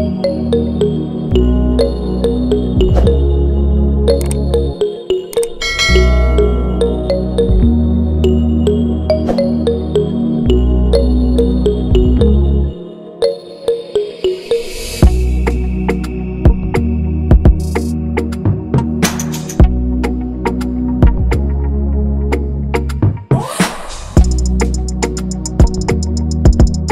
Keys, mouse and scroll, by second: 2.0 shift+click, 5.9 shift+click, 11.9 ctrl+=, 12.2 ctrl+=, 12.5 ctrl+=, 16.3 ctrl+-, 16.6 ctrl+-, 16.7 ctrl+-, 19.4 ctrl+c, 20.2 ctrl+f, 21.5 shift+click.